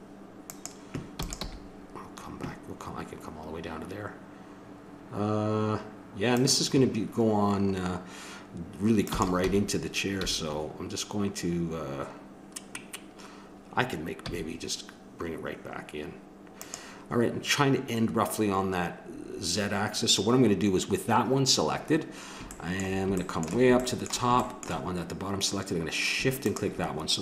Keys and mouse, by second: 1.1 e, 1.6 g, 9.0 click, 9.1 e, 21.8-24.6 middle drag, 26.4-27.2 drag.